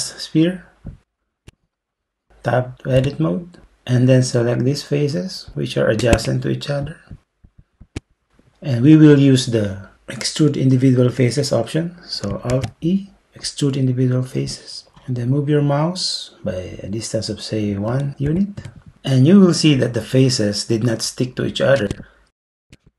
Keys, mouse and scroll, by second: 3.0 Tab, 12.5 alt+e, 18.3 1, 18.6 Return.